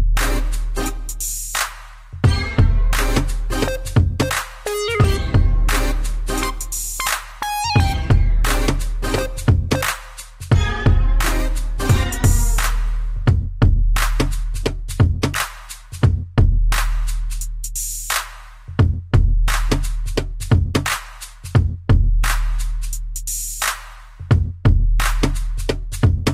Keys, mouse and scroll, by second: 0.7 middle click, 0.8 middle click, 1.1 scroll down 3, 1.6 middle click, 1.6-2.5 scroll up 3, 3.6 click, 5.4 click, 6.7 click, 6.9 click, 7.2 middle click, 7.6 scroll up 2, 7.9 shift+middle click, 9.4 click, 10.1 middle click, 10.4 b, 10.8 click, 12.8 click, 13.8 Escape, 14.9-15.2 typing, 17.7 click, 17.8 click, 18.1 middle click, 18.9 scroll down 3, 19.2 middle click, 19.6-20.1 scroll down 2, 19.9 middle click, 20.8 scroll up 2, 21.2 shift+middle click, 21.7 scroll up 1, 22.0 middle click, 22.8 shift+middle click, 23.3 scroll down 2, 25.9 shift+click.